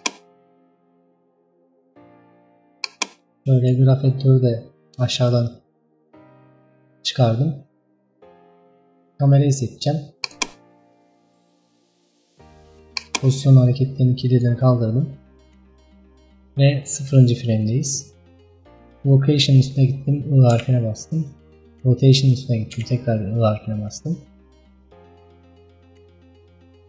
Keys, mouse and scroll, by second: 0.0 click, 0.6 scroll down 2, 1.1 scroll up 1, 1.3-2.2 scroll down 1, 3.1-10.4 drag, 13.0-18.1 drag.